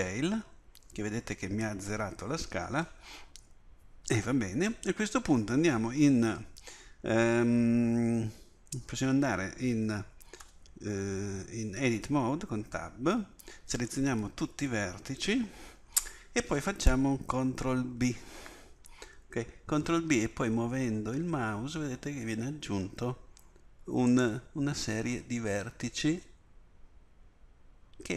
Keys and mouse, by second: 10.4 Tab, 13.4 a, 14.0 a, 17.9 ctrl+b.